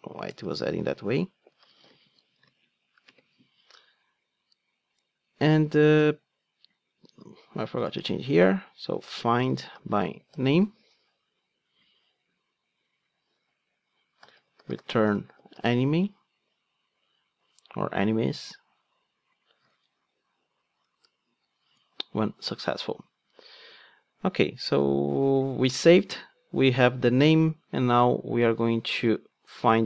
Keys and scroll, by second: 19.7 alt+Return.